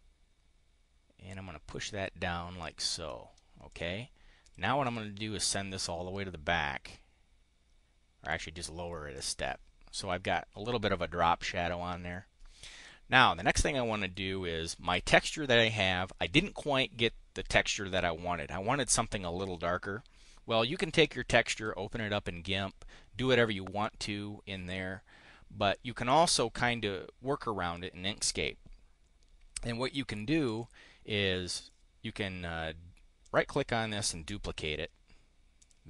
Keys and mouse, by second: 3.6 click, 4.3 click, 4.8 click, 8.2 click, 9.1 click, 13.3 click, 30.4 click, 31.5 click, 33.1 click, 35.5 click.